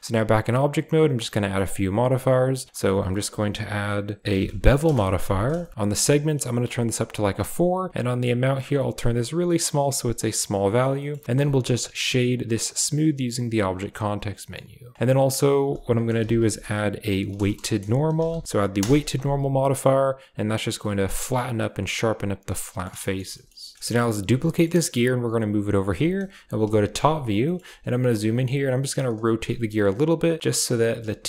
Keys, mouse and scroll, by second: 1.1 click, 1.6 click, 2.1 click, 2.8 click, 5.7 shift+middle click, 6.6 click, 8.0-10.7 shift+drag, 10.9 middle drag, 11.3 w, 14.3 middle click, 15.4-18.8 drag, 20.4 click, 20.8 click, 21.5-22.9 middle drag, 23.1 middle click, 23.4 shift+middle click, 24.2 shift+d, 26.6 KP_7, 27.5 shift+middle drag, 28.2 r, 29.5 r, 30.8 g.